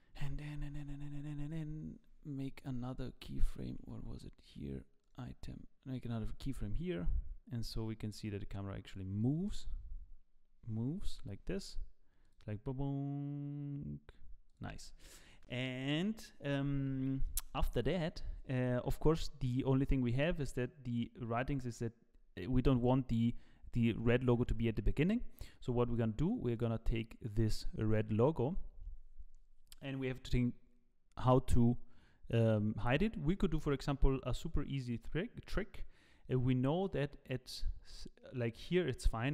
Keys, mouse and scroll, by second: 1.5 click, 2.0-3.8 scroll up 6, 3.8 n, 5.0 click, 6.5 i, 7.6 click, 9.5 KP_0, 11.1 KP_0, 12.2 click, 14.5 click, 19.8 z, 21.0 click, 26.5 click, 33.3 middle click, 34.1-34.8 scroll down 10, 34.8 middle click, 35.0 scroll down 2, 36.9 click, 37.0 scroll down 1.